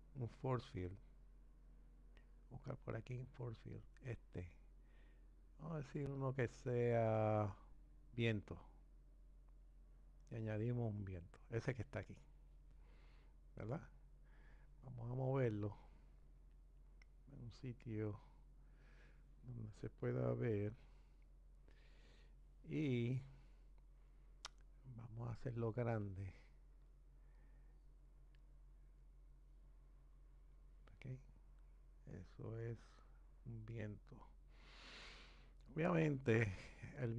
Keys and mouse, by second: 15.6-17.0 drag, 27.0-29.1 drag.